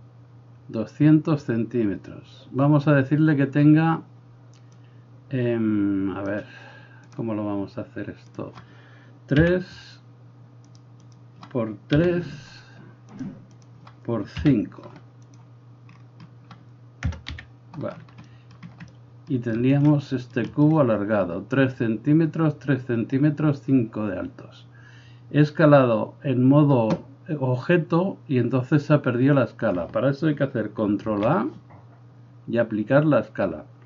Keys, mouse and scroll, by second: 4.9-7.2 drag, 7.2-8.4 middle drag, 8.4-10.8 drag, 10.8 middle click, 11.0-13.2 drag, 13.2 middle click, 13.6-15.4 drag, 15.4-31.1 middle drag, 17.0 KP_0, 17.3 KP_Decimal, 31.1 ctrl+a, 33.3 middle click.